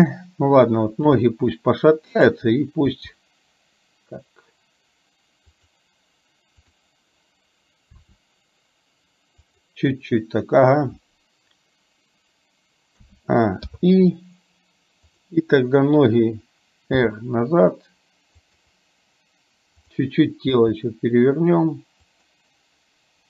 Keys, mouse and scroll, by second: 3.0 r, 6.8 click, 8.1 r, 13.0 a, 13.8 i, 15.1 click, 17.1 r, 20.0 click, 20.5 r.